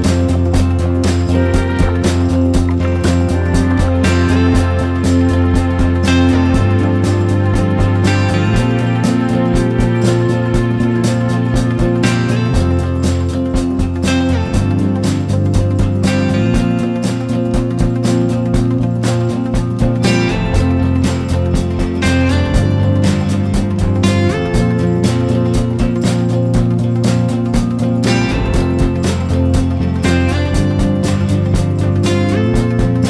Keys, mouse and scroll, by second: 1.9-2.2 scroll down 2, 2.9-10.0 drag, 11.0 scroll up 1, 14.1 click, 17.0 click, 20.2-22.0 drag, 25.5-28.8 drag, 29.2 click.